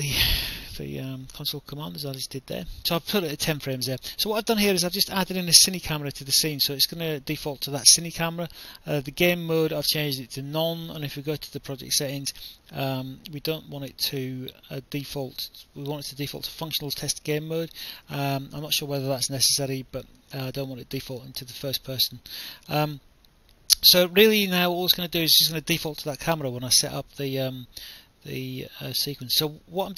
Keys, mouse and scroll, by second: 1.2 Right, 1.6 BackSpace, 1.8 1.